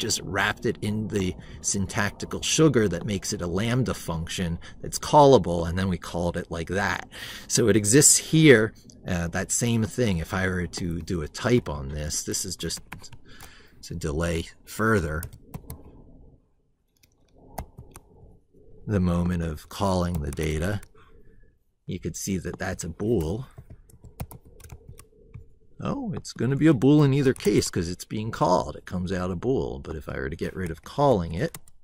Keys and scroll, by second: 12.4 ctrl+Left.